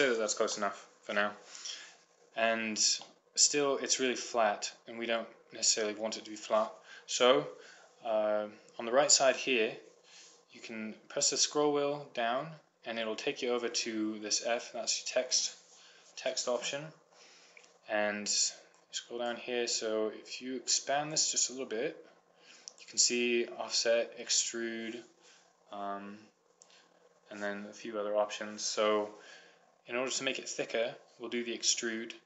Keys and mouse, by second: 5.1-6.2 middle drag, 15.6-17.5 drag, 17.3 middle click, 19.1-20.9 drag, 20.9 middle click, 21.5-23.0 drag, 23.0 middle click, 23.2 click, 23.4-32.2 middle drag.